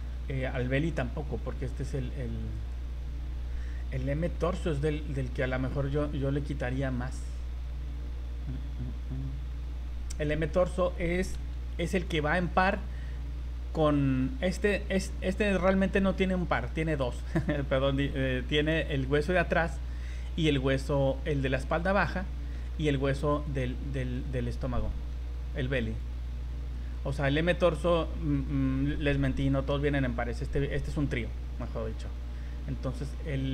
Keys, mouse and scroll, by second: 0.4 click, 2.5 click, 9.2 scroll down 2, 9.5 scroll up 2, 11.3 v, 12.0 right click, 13.9 scroll down 2, 14.1 middle click, 18.7 right click, 21.3 middle click, 23.4 right click, 24.1 right click, 24.4 middle click, 25.9 right click, 26.8 right click, 31.6 middle click, 33.1 middle click.